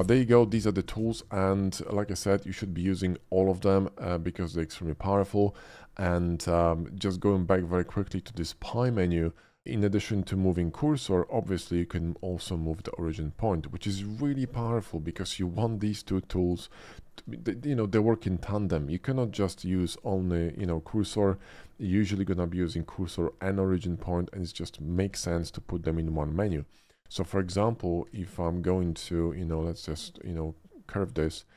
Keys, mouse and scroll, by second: 0.0 shift+middle click, 0.9-1.4 shift+middle drag, 1.7 shift+middle drag, 2.1 shift+middle click, 4.2 shift+middle click, 4.7 shift+middle click, 6.1-7.8 shift+middle drag, 8.1 click, 8.9-9.6 middle drag, 10.6 shift+s, 11.2 shift+s, 13.2 click, 14.2 shift+click, 14.4 x, 14.6 click, 15.2 shift+a, 16.4 click, 16.8-17.2 middle drag, 17.4 shift+middle drag, 19.5 shift+s, 20.2 shift+s, 21.6-22.3 middle drag, 24.3 shift+middle click, 25.1 shift+s, 26.1 right click, 27.2 click, 28.1 Tab, 28.4 click, 29.3 ctrl+b, 30.1 click, 30.6-31.5 middle drag.